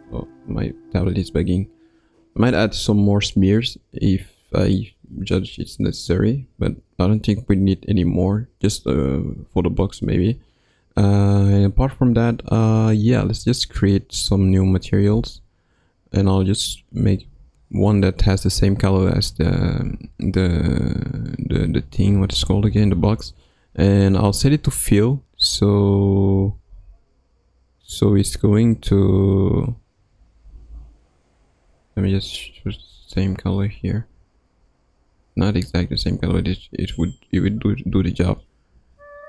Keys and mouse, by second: 15.3 click, 16.7 click, 22.8 click, 24.3 click, 26.7 click, 28.7 click, 36.4 click.